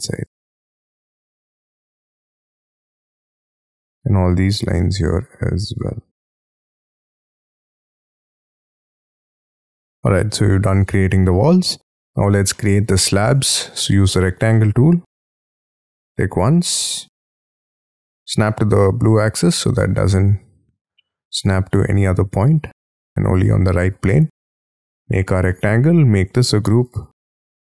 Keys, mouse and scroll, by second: 0.4 Delete, 0.7 Delete, 1.1 Delete, 2.0 e, 6.5 middle click, 6.7 scroll down 3, 6.8 scroll up 7, 7.1 Delete, 7.1 Delete, 7.2 scroll down 2, 7.4 p, 8.1 9, 8.5 shift+', 8.6 shift+Return, 9.0 double click, 9.1 space, 9.2 Escape, 9.4 F3, 9.6 middle click, 9.7-10.1 scroll down 5, 10.1 middle click, 12.5 middle click, 13.8 r, 14.2 scroll up 7, 14.5 middle click, 15.8 middle click, 16.2 scroll down 6, 17.1 scroll, 17.2 Up, 17.5-18.0 scroll up 5, 18.6 scroll up 4, 18.8 middle click, 19.7 scroll up 4, 20.2 middle click, 23.0 middle click, 24.1-24.8 scroll down 13, 24.8 middle click, 25.5 space, 25.6 scroll up 6, 26.1 double click, 26.4 g, 26.9 double click, 27.5 p.